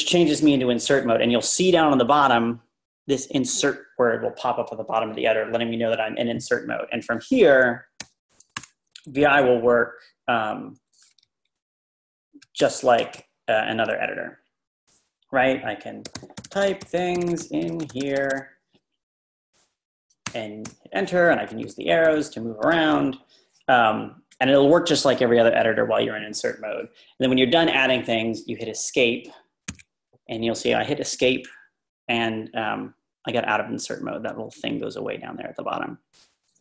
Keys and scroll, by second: 8.0 o, 8.6 BackSpace, 11.2-12.4 Right, 12.6 Return, 13.0 Return, 13.1 Return, 15.8-20.1 typing, 20.2 Return, 20.7 Return, 21.2 Up, 21.4 Up, 21.6 Up, 22.0 typing, 29.7 Escape.